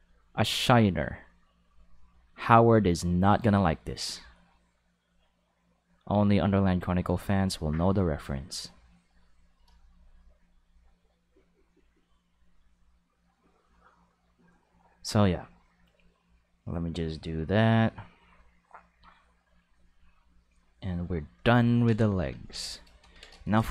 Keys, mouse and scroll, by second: 11.2-21.3 drag.